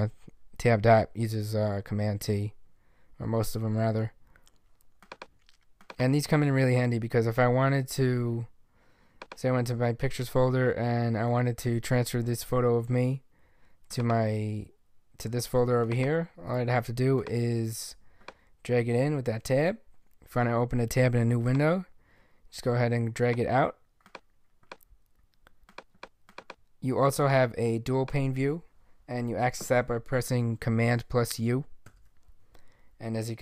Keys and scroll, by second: 31.9 super+u.